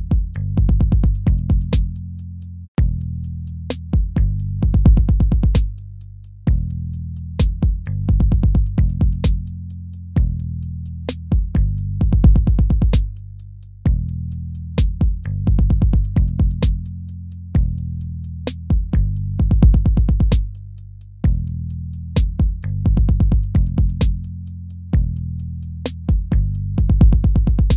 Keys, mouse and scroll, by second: 2.6 ctrl++, 15.3 ctrl+z, 18.7 ctrl++, 20.5 ctrl+-, 21.0 ctrl++, 21.7 ctrl++, 22.3 ctrl+-, 22.6 ctrl+-.